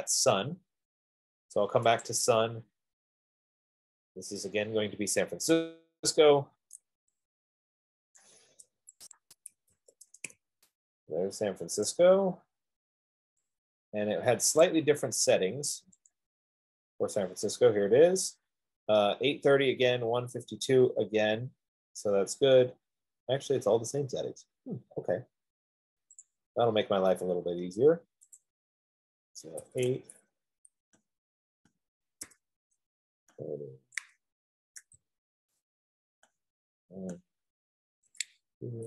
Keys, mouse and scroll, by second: 0.1 click, 2.4-4.3 drag, 6.5 click, 8.4 click, 9.4 click, 9.9-10.6 typing, 12.3 click, 15.0 click, 16.5 click, 26.6 click, 28.7 click, 29.9 typing, 31.5 Tab, 31.5 click, 32.0 click, 32.5 typing, 33.8 click, 34.1-35.3 typing, 36.7 click, 36.9-38.8 typing, 37.5 click.